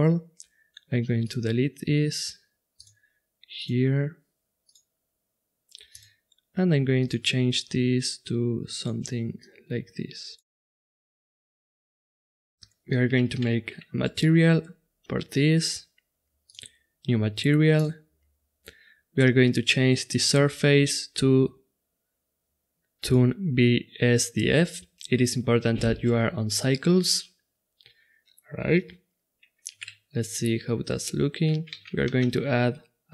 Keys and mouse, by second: 3.5-5.3 drag, 5.9-8.8 drag, 11.0 click, 11.8 click, 12.1 right click, 12.6 middle click, 13.4 shift+z, 15.6 middle click, 15.8-19.6 drag, 20.8-22.6 drag, 30.1 shift+z, 31.8 shift+z, 32.1 shift+a.